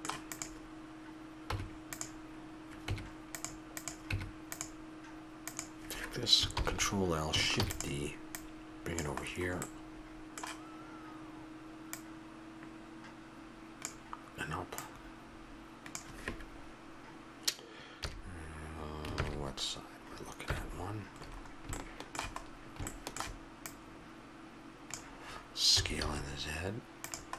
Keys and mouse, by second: 0.3-1.5 drag, 1.5 Tab, 4.1 Tab, 6.5 ctrl+l, 7.6 shift+d, 9.2-10.9 drag, 11.9-13.7 drag, 14.8-16.6 drag, 18.0 KP_3, 20.4 KP_1, 23.6-25.7 drag, 25.7 s.